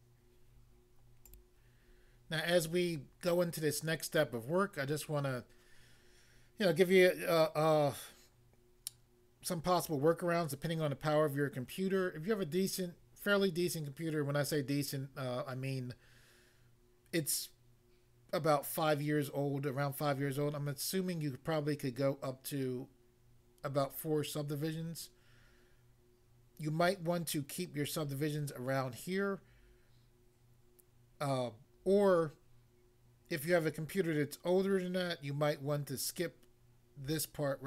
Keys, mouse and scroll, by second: 1.2 click, 1.5 click.